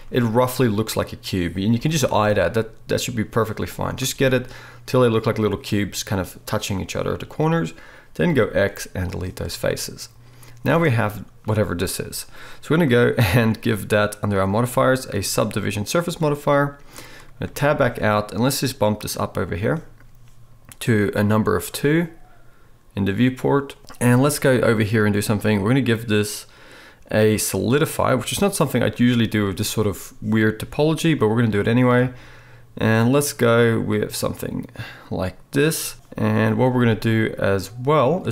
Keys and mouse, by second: 1.8 g, 2.5-4.7 shift+middle drag, 4.7-14.8 right drag, 8.3 x, 14.8-16.0 middle drag, 17.4 Tab, 31.3-37.2 middle drag, 37.2-38.3 right drag.